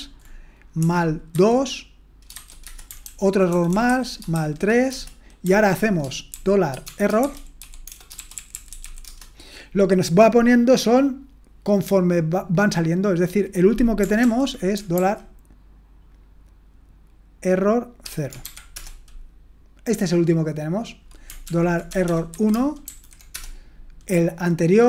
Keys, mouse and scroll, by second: 0.8-2.3 typing, 2.6 Return, 3.0 ctrl+p, 3.5-9.6 typing, 14.2 ctrl+p, 15.0 [, 18.0 0, 18.4 ], 18.7 Return, 21.5 ctrl+p, 21.9 BackSpace, 22.0 BackSpace, 22.3 1, 22.8 ], 23.3 Return.